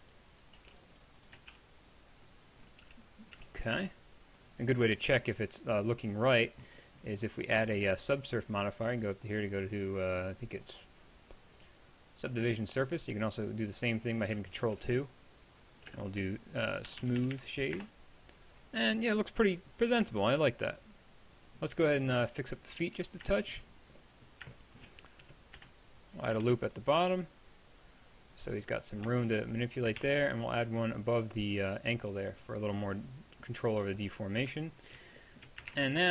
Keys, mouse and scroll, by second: 1.5 x, 2.8 Tab, 3.4 Tab, 6.9-12.4 drag, 14.2 click, 14.6 ctrl+2, 15.9 space, 22.6 click, 23.0 Tab, 23.4-24.6 drag, 25.2 KP_1, 25.6 KP_3, 26.4 ctrl+r, 28.4 click, 34.4 KP_1, 35.7 ctrl+Tab.